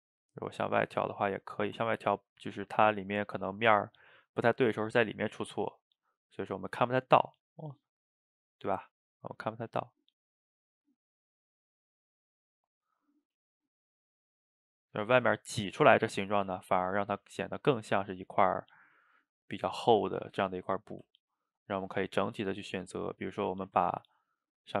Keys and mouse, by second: 1.6-7.8 ctrl+middle drag, 7.8-10.9 drag, 13.8-15.4 shift+drag, 15.4-20.6 middle drag, 20.6 click, 20.9-23.2 ctrl+middle drag, 23.2 shift+right click, 23.8-24.8 ctrl+middle drag.